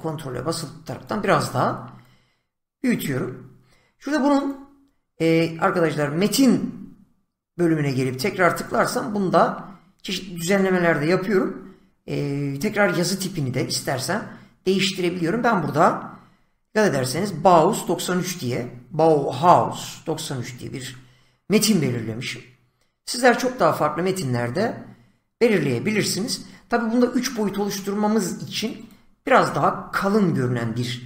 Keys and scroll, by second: 16.3 <.